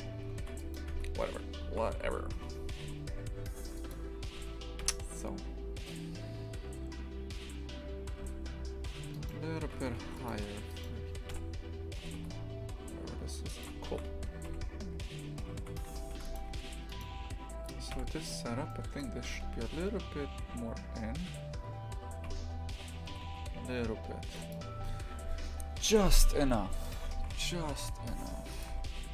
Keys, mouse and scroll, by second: 0.9 Tab, 1.6 shift+f, 4.8 KP_3, 8.1 Tab, 9.1 right click, 9.7 shift+f, 10.3 3, 10.7 right click, 11.3 KP_3, 12.0 g, 13.9 shift+f, 15.4 shift+f, 16.9-17.9 right drag, 17.9 KP_3, 18.7 shift+middle click, 19.3 g, 26.9 click, 27.1 shift+f, 28.7 2.